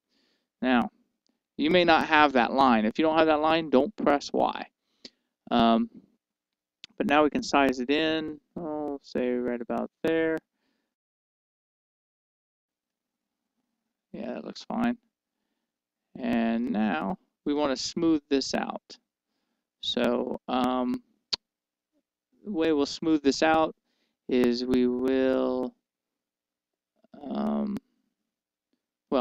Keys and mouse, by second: 12.2-13.6 drag, 13.6-14.9 middle drag, 15.5 middle click, 17.2-20.6 middle drag, 28.1-29.2 middle drag.